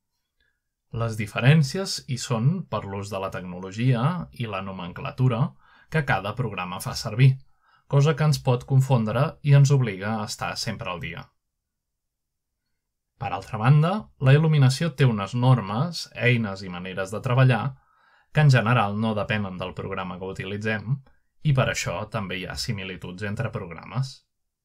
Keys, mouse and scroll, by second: 4.1-4.6 middle drag, 5.1-6.5 middle drag, 6.5 click, 9.0 scroll down 1, 9.7-10.1 scroll down 1, 10.9 click, 11.7 click, 12.4 click, 13.2 click, 14.0 click, 15.1 click, 15.8-16.6 scroll down 1, 17.1 click, 18.6-19.7 scroll down 1, 20.8 click, 22.3 shift+middle drag, 23.7 shift+middle drag.